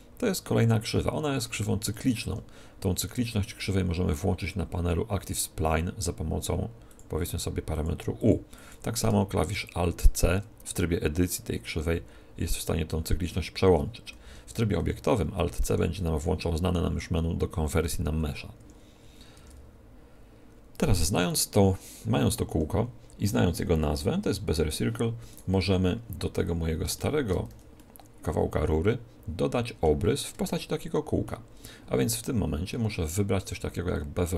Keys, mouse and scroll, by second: 3.2 middle click, 6.8-10.4 drag, 9.8 alt+c, 12.0 alt+c, 12.4 alt+c, 12.8 alt+c, 13.1 alt+c, 14.2 alt+c, 14.7 Tab, 15.6 alt+c, 19.3 Tab, 22.4 Tab, 25.2-26.9 right drag, 26.9-29.6 middle drag, 27.4 z, 30.4-32.2 middle drag.